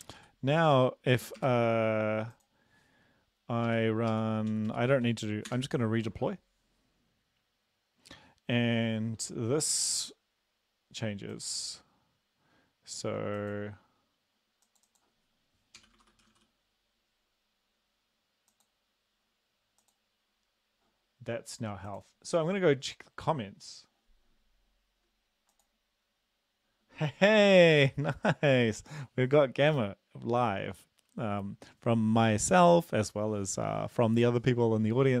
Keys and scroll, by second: 15.8-16.3 typing.